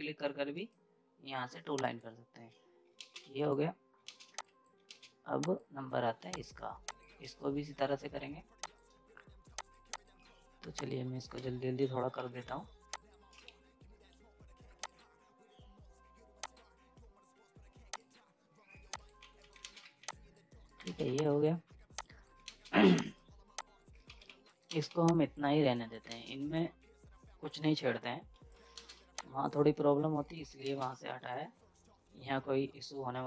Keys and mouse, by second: 0.5 right click, 1.7 click, 3.0 space, 3.2 z, 3.3 right click, 4.0 ctrl+space, 4.2 z, 4.3 click, 4.9 ctrl+space, 5.4 click, 8.6 shift+click, 12.1 F10, 12.9 click, 19.2 z, 19.3 right click, 19.3 right click, 19.6 ctrl+space, 19.8 z, 20.1 click, 20.6 right click, 21.1 z, 21.2 click, 22.4 ctrl+space, 23.0 click, 24.1-24.8 typing, 24.4 right click, 24.6 ctrl+space, 25.1 click, 25.8 right click, 26.1 ctrl+space, 28.3 z, 28.5 right click, 28.9 z, 29.1 click, 29.2 click, 30.2 right click, 30.7 ctrl+space, 30.9 z.